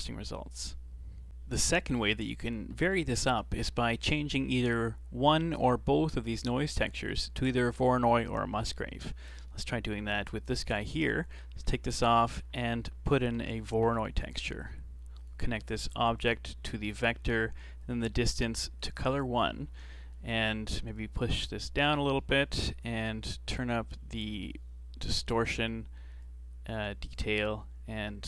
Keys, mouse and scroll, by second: 1.7 middle click, 2.2 scroll down 3, 2.4-3.7 middle drag, 3.7-4.1 scroll up 3, 4.1-6.8 middle drag, 6.8 scroll down 3, 7.1-9.4 middle drag, 9.4-10.7 alt+right drag, 10.7 alt+click, 11.6 x, 12.0 shift+a, 16.2 click, 17.8 click, 19.1-21.0 middle drag, 21.0-22.2 drag, 22.2 middle click, 22.6-23.2 scroll up 4, 24.1-28.2 drag.